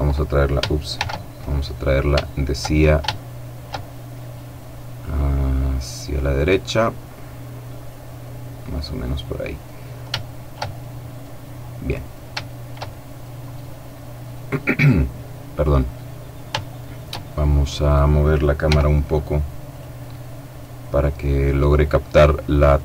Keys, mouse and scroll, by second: 0.9 shift+c, 1.7-2.1 scroll up 3, 2.1 shift+middle click, 2.6-3.0 shift+scroll up 3, 3.0 middle click, 4.2-5.4 drag, 5.6-8.3 drag, 8.8 middle click, 10.1 shift+middle click, 11.3 scroll down 2, 11.6 middle click, 12.3 shift+middle click, 12.7 shift+middle click, 13.3-14.1 shift+scroll down 3, 14.1-14.7 scroll up 2, 15.5-16.3 scroll down 2, 16.3 shift+scroll down 1, 16.5 shift+middle click, 17.7 right click, 18.5 g, 19.5 click, 19.9 right click, 21.5 click, 22.5 click.